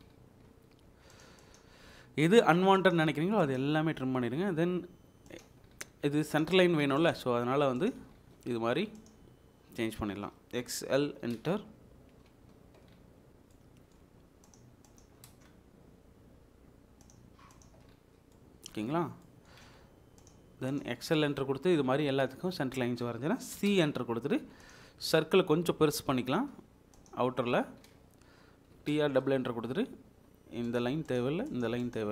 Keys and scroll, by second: 0.8 Escape, 1.8 Delete, 5.7 Escape, 8.0 Escape, 9.8 Escape, 10.9-11.4 typing, 15.0 Escape, 15.3 space, 17.7 Escape, 19.6 space, 23.6 c, 23.7 space, 27.3 Escape, 28.8 typing.